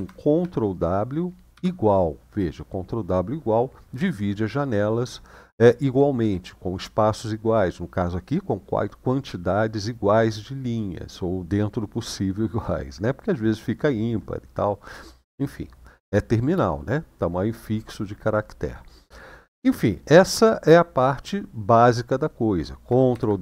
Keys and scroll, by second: 1.2 =, 22.9 ctrl+w.